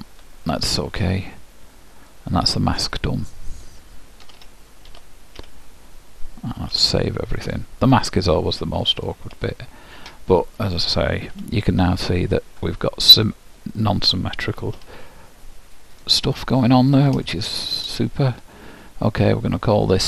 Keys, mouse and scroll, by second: 2.2-4.1 drag, 4.4 Tab, 5.0 alt+h, 6.9 ctrl+w, 8.0-10.6 middle drag, 10.6-12.3 drag, 11.4 h, 11.9-13.8 middle drag, 14.6-16.1 middle drag, 14.9 alt+h, 16.7-19.1 middle drag.